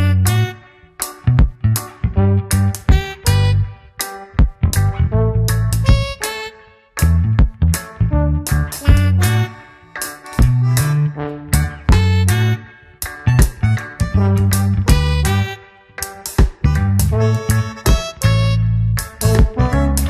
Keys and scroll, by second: 0.8 s, 6.0 ctrl+alt+z, 7.5 space, 9.6 ctrl+KP_Subtract, 11.1 a, 11.4 s, 13.9 Return, 14.3 space, 15.0 Return, 16.4 alt+space, 16.8 c, 17.8 Return, 18.5 ctrl+KP_Add, 19.1 alt+i, 19.3 alt+a, 19.7 ctrl+space.